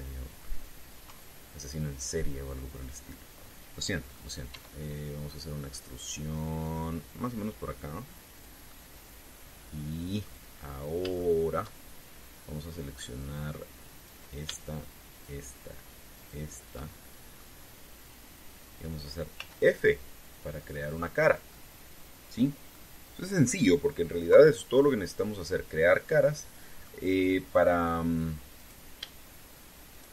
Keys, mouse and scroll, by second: 1.8 KP_3, 5.3 e, 9.1 click, 9.5-11.1 middle drag, 11.3-11.8 scroll up 1, 11.9 shift+middle click, 14.8 right click, 15.9 shift+right click, 16.9 shift+right click, 17.6 shift+middle click, 20.1 f, 21.0 scroll down 2, 23.5 middle click, 25.0 KP_3, 26.6-27.7 middle drag, 27.9 scroll up 1, 29.3 right click.